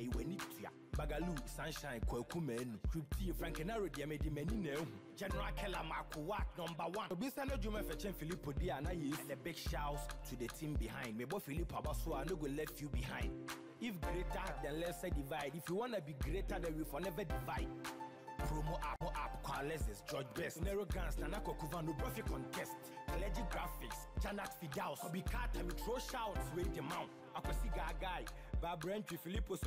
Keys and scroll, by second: 25.6 ctrl+t.